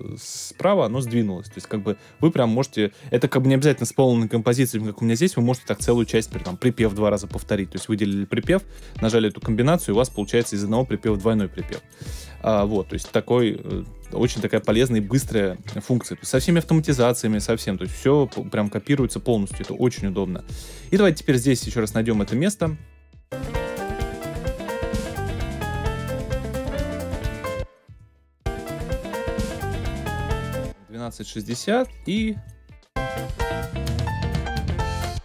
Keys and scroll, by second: 22.6 alt+super+space, 23.4 space, 27.2 space, 28.3 space, 30.3 space, 32.3 space, 34.8 space.